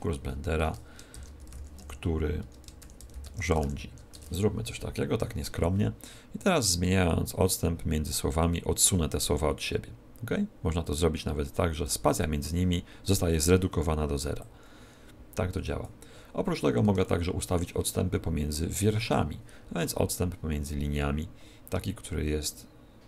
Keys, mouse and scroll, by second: 0.5 Return, 1.1-3.6 typing, 4.1 Tab, 6.6 click, 14.3 click, 17.0 shift+middle click, 18.6 click.